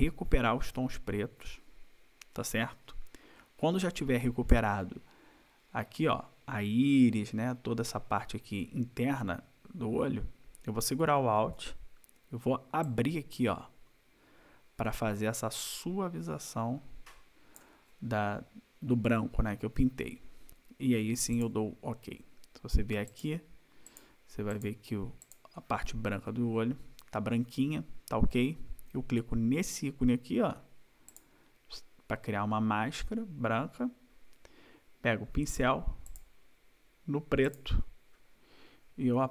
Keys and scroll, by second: 39.2 =.